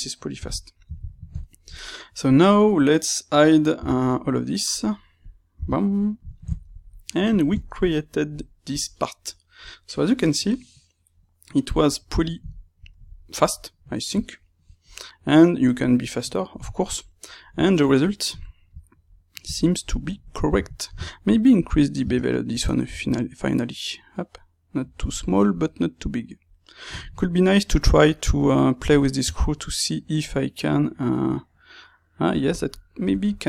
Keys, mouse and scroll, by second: 0.4 x, 2.2 click, 2.6-5.1 middle drag, 3.7 h, 5.1 click, 5.5 h, 5.9-21.5 middle drag, 21.5-22.6 drag, 22.6 space, 26.4-33.4 middle drag.